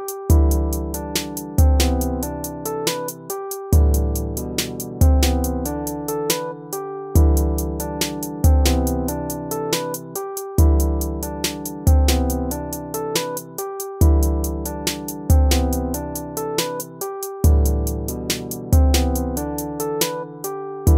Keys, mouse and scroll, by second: 4.8 ctrl+z.